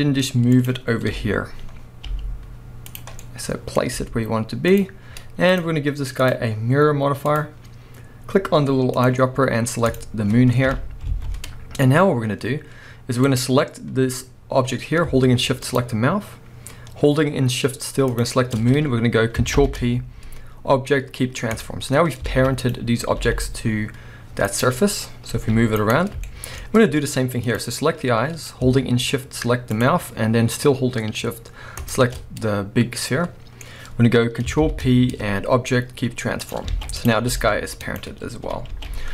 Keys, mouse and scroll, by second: 1.1 KP_1, 1.7 scroll up 1, 2.0 g, 3.0 click, 3.1 scroll down 1, 3.2-4.8 middle drag, 4.0 g, 4.8 click, 5.5-9.0 drag, 10.7 KP_1, 11.0 alt+a, 12.3 scroll down 1, 12.8 scroll up 1, 13.2 click, 14.3-15.6 scroll up 1, 15.6 shift+click, 18.1 shift+click, 19.6 ctrl+p, 22.3 alt+a, 22.6 click, 23.1 r, 24.6 right click, 24.7-25.4 scroll down 1, 25.4 g, 25.9 right click, 26.2-27.5 shift+middle drag, 26.6-27.5 scroll down 1, 27.5 click, 27.9-28.6 scroll up 1, 29.7 shift+click, 31.8 shift+click, 32.2-33.0 scroll down 1, 33.0-37.0 middle drag, 33.6 scroll up 1, 34.6 ctrl+p, 36.7 alt+a, 37.0 drag, 37.3 g, 38.0 right click, 38.4 KP_1, 38.7 alt+a.